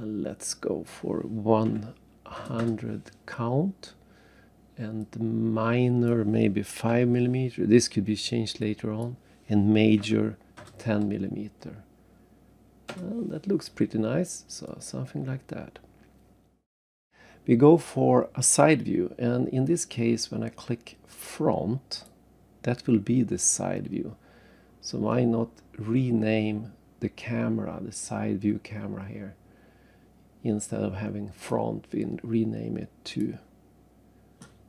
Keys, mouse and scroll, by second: 0.5 click, 1.7 1, 3.8 typing, 5.0 click, 6.9 5, 8.6 click, 10.0 1, 12.9 Return, 14.0 scroll down 3, 14.7 right click, 19.3 scroll up 1, 19.6 scroll down 1, 19.7-20.4 scroll down 1, 21.9 click, 22.9-23.2 scroll down 3, 25.2 scroll up 1, 25.8-26.2 scroll down 2, 26.9 scroll up 1, 28.0-28.3 scroll up 2, 31.3 click, 33.1 click.